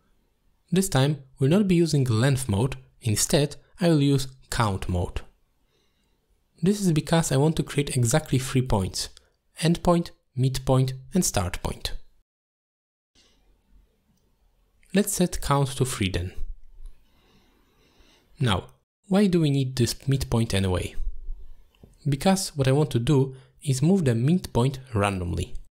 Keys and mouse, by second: 0.3-1.0 drag, 2.4-3.3 drag, 4.1-5.4 drag, 6.9 click, 7.3 click, 7.5 click, 7.9 click, 8.2 click, 8.6 click, 15.1 middle click, 16.2 click, 16.5 click, 20.1 middle click, 20.9 middle click, 21.9-22.4 middle drag, 24.2 middle click.